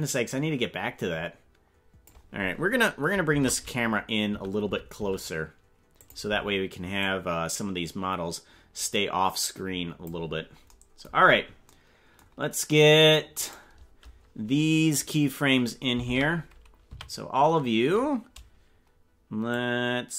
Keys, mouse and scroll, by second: 0.0-2.2 drag, 3.3 shift+`, 7.0-10.1 drag, 11.1-11.5 scroll down 6, 13.4 right click, 16.0 ctrl+Tab, 16.8 a, 19.5-20.1 drag.